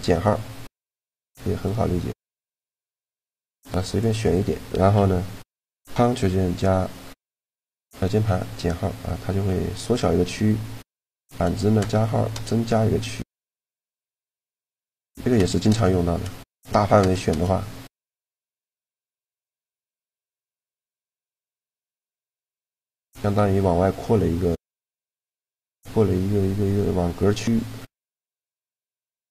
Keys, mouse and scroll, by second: 0.4-2.4 middle drag, 1.9-3.6 drag, 3.2 c, 22.4-24.0 middle drag, 24.8-27.4 middle drag, 27.4 click, 29.2 click.